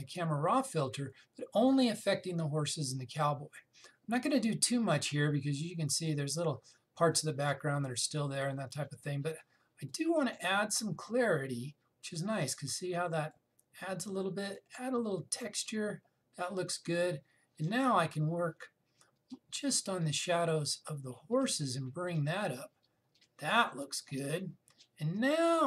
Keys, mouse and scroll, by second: 10.5-18.8 drag, 18.8-25.6 drag.